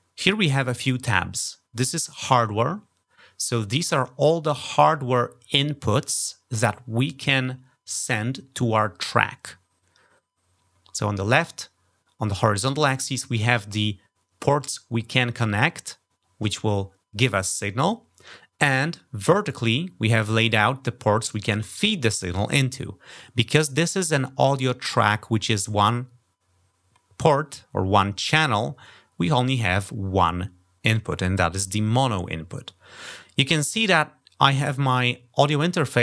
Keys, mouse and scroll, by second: 1.1 click.